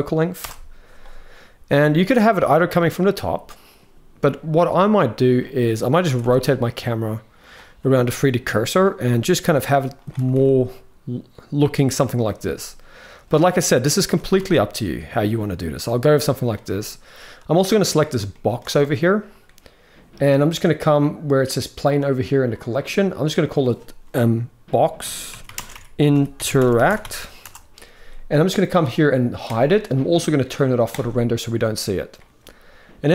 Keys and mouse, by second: 1.4 g, 4.4-5.1 drag, 5.8 r, 7.5 g, 9.1 r, 9.9 r, 12.2 r, 13.8 r, 18.1 shift+middle click, 23.0 click, 26.3 click, 29.2 click, 30.7-31.9 drag.